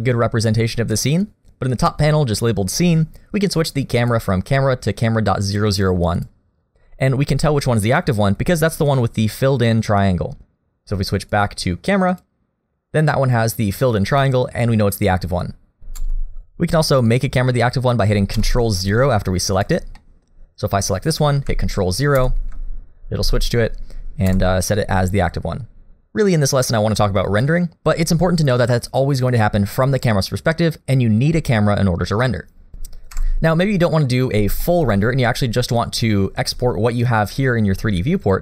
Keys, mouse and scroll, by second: 4.0 click, 7.0 middle click, 11.2 click, 16.0 ctrl+KP_0, 18.4 KP_0, 19.6 click, 20.0 middle click, 22.2 KP_0, 24.3 KP_0, 32.7 click, 33.1 Delete, 34.6 middle click, 35.2-37.1 scroll up 1.